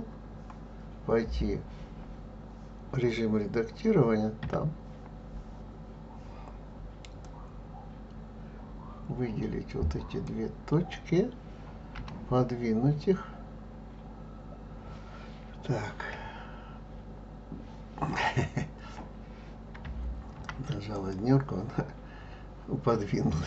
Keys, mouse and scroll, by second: 4.4 Tab, 7.2 click, 11.9 g.